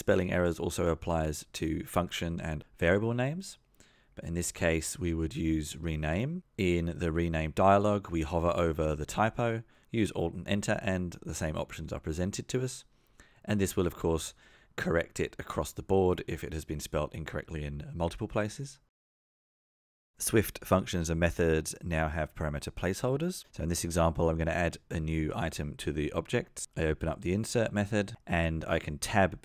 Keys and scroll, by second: 2.8 F2, 3.6 alt+Return, 11.5 Return, 14.3 alt+Return, 17.6 Return, 27.9 Return.